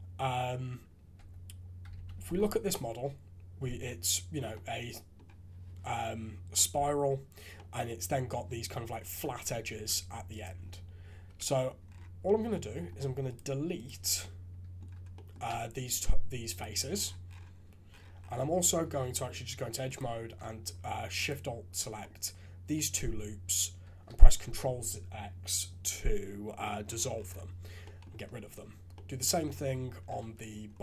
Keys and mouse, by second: 1.1 Tab, 1.9 alt+a, 2.3-3.6 drag, 4.5 click, 6.5 click, 7.5 click, 9.8 3, 11.2 KP_Decimal, 12.2 click, 14.2 click, 15.1 click, 15.4 x, 18.7 2, 19.9 alt+click, 21.1 alt+shift+click, 22.0 click, 23.8 ctrl+x, 27.8 right click, 28.9 click.